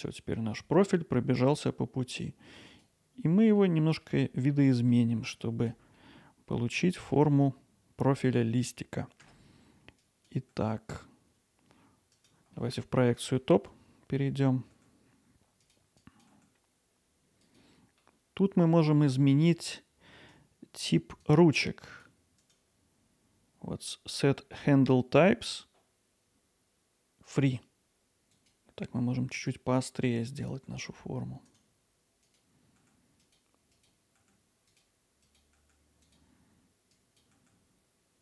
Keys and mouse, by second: 2.8-3.6 drag, 4.9 middle click, 9.3 Tab, 10.1 click, 10.5 g, 13.3 KP_7, 14.2 middle click, 14.7 g, 16.1 click, 16.3 g, 17.4 click, 20.3-22.4 drag, 22.5-28.3 right drag, 28.3 click, 28.8 g, 29.4-30.5 drag, 30.5 g, 31.5 right click, 32.1-37.7 typing, 32.2 click, 32.7 click, 33.0 click, 34.0 click, 34.7 click, 35.2 click, 35.7 click, 36.4 click, 38.1 click.